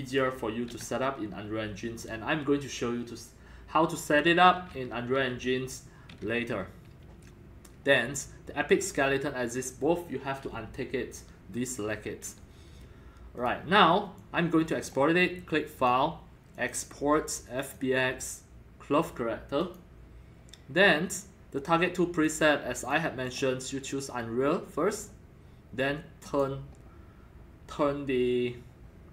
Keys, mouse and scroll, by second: 13.3 click, 14.1 click, 15.7 click, 16.5 click, 17.6 click, 19.6 click, 21.8 click, 22.8 click, 23.2 click, 24.9 click, 26.2 click.